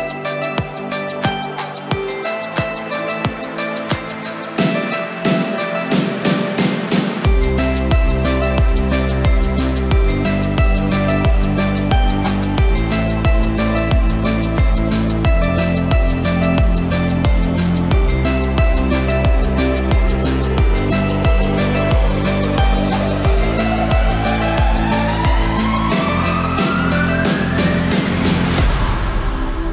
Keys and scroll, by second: 22.4 ctrl+t.